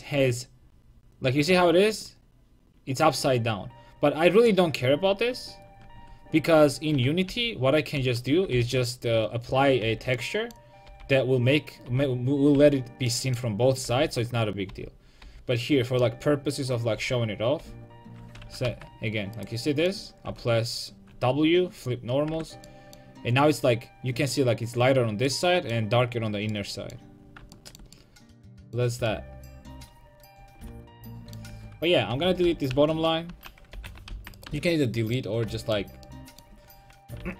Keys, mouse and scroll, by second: 4.9 Tab, 5.9 Tab, 6.5 Tab, 7.0 a, 7.3 a, 8.0 a, 8.5 l, 9.8 l, 10.9 l, 11.9 l, 12.6 l, 13.9 l, 14.7 l, 15.2 l, 17.0 l, 17.6 l, 18.7 g, 20.3 w, 22.4 Tab, 30.9 Tab, 31.5 Tab, 32.1 Tab, 32.5-34.5 typing, 37.2 l.